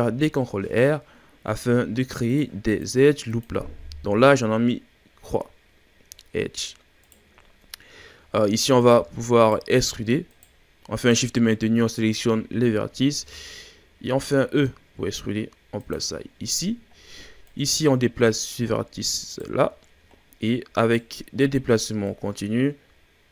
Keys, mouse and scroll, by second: 0.0 ctrl+r, 3.3 click, 6.2-6.5 ctrl+scroll down 1, 6.5-7.0 scroll up 1, 7.0 right click, 7.4-8.1 ctrl+scroll down 1, 8.1-8.8 shift+scroll down 4, 8.8 right click, 9.4 shift+right click, 10.3 shift+right click, 10.9 shift+right click, 12.0 shift+right drag, 13.2 e, 16.2-17.5 shift+scroll down 2, 17.5 right click, 19.9 ctrl+scroll down 2, 20.1-20.8 scroll up 1, 20.8 right click, 22.1 right click.